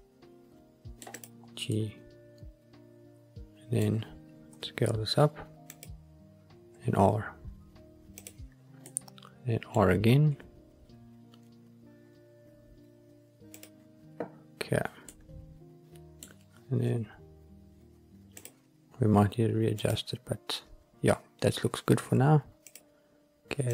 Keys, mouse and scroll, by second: 1.1-1.6 drag, 1.6-3.8 middle drag, 4.4 s, 5.6-6.6 drag, 6.6 r, 8.1 click, 8.8-9.6 middle drag, 9.8-10.2 scroll up 1, 13.4 click, 15.0-16.3 middle drag, 16.8 r, 18.3 click, 19.7 click, 22.6 click.